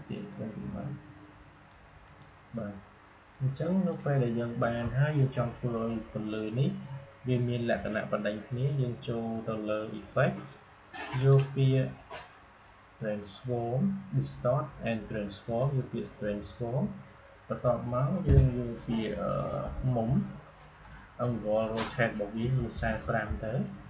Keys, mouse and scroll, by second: 2.0-6.2 drag, 10.0 click, 15.4 click, 19.0 click.